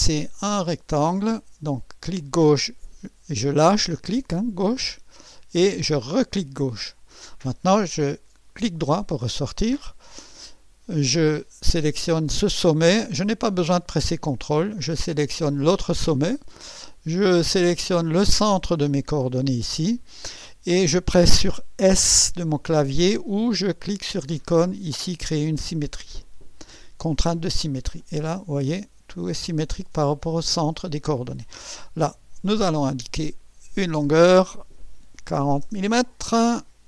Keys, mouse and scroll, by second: 0.0 click, 2.2 click, 6.0 click, 8.5 right click, 10.8 click, 15.5 click, 18.8 click, 26.1 click, 28.0-30.6 drag, 31.3 scroll up 1, 32.6 click, 33.8 click, 35.3-36.2 typing.